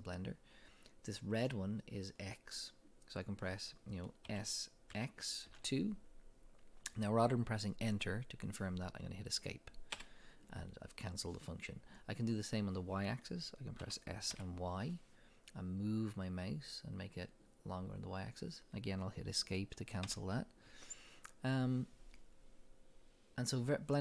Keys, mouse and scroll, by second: 4.3 s, 10.0 Escape, 13.8 s, 18.5-19.5 middle drag, 20.1 Escape, 20.1 middle click.